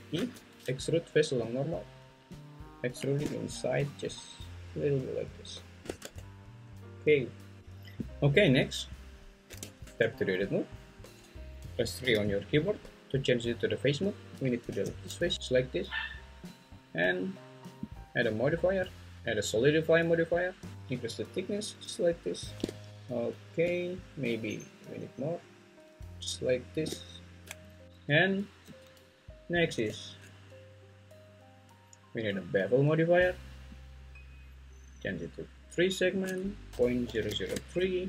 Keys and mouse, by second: 0.1 alt+e, 6.0 Tab, 9.6 Tab, 12.0 3, 14.7 x, 17.9-22.3 drag, 24.5-26.8 shift+drag, 27.8 `, 28.6 `, 29.8 Tab, 31.7 click, 32.5-33.8 drag, 35.1-37.5 drag, 37.2 0.